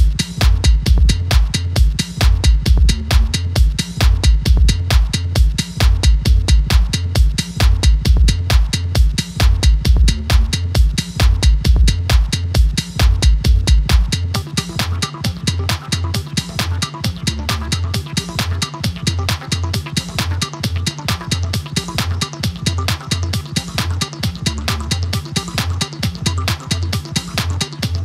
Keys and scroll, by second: 1.4 Up, 1.6 Page_Up, 1.6 Up, 1.8 Up.